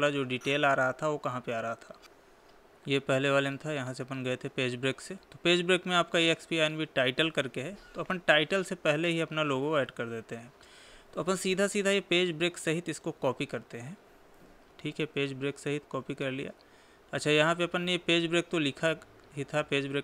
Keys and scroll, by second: 14.9 ctrl+c.